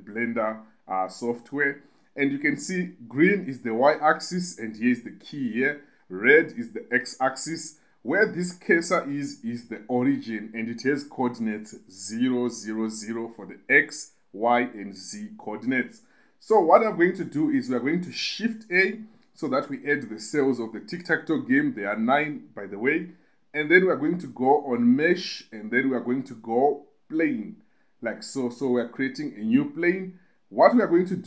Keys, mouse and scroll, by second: 18.8 shift+a.